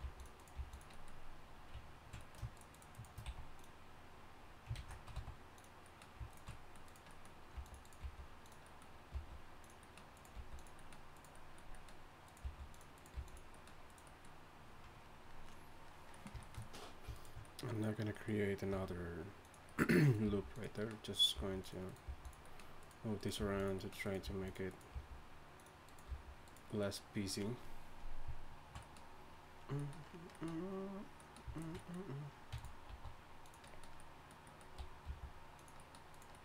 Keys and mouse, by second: 0.0 g, 0.5 g, 0.9-2.2 drag, 3.2 x, 3.7 click, 4.7 ctrl+z, 5.1 x, 6.3 click, 7.2 click, 7.5 g, 8.0 g, 8.6-9.8 drag, 9.1 g, 10.1-11.3 drag, 10.3 g, 12.4 g, 13.1 g, 17.1-18.2 right drag, 18.7 g, 20.2 g, 21.3 g, 22.0 g, 22.4 click, 23.4 g, 24.2 g, 24.9 g, 25.9 right click, 26.7 right click, 31.8 right click, 32.5 e, 32.9 s, 34.0 middle click, 35.0 g, 36.3 click.